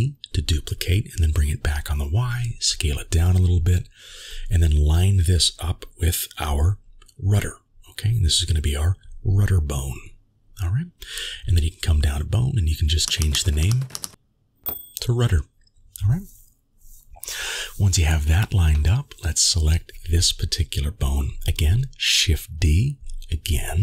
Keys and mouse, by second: 4.0 s, 6.0 g, 7.8 g, 8.7 g, 11.3 click, 12.0-13.9 drag, 13.3 d, 15.9 middle click.